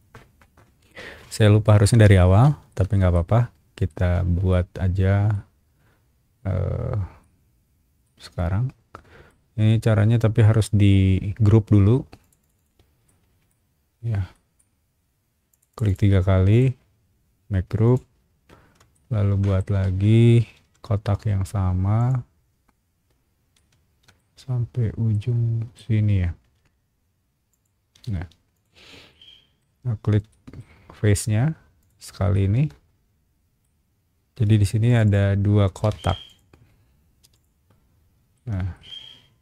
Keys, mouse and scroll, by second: 1.4 scroll down 1, 2.7 shift+middle click, 3.9 shift+middle click, 5.3-7.2 shift+middle drag, 7.6 scroll up 1, 8.0-9.3 middle drag, 12.2 click, 12.4 click, 12.5 click, 13.0 middle click, 14.3 middle click, 14.7-15.1 scroll up 2, 15.5 click, 15.7 click, 15.8 click, 16.5-17.8 right drag, 17.8 click, 18.9 shift+middle click, 20.0 scroll down 1, 20.6 r, 22.0 click, 23.0-23.4 scroll up 2, 23.5 shift+middle click, 24.3-24.9 scroll up 2, 25.1 middle click, 26.1 scroll up 1, 27.5 shift+click, 28.1 space, 28.5 click, 29.1 middle click, 29.6 scroll up 1, 29.8-30.2 scroll down 2, 30.3 shift+middle click, 30.6 scroll up 2, 30.7-31.2 scroll down 4, 31.8 shift+click, 32.3-33.6 shift+middle drag, 34.8 shift+click, 35.0 shift+click, 35.9 Escape, 36.2 click, 37.2 m, 37.3 click, 38.3 shift+middle click.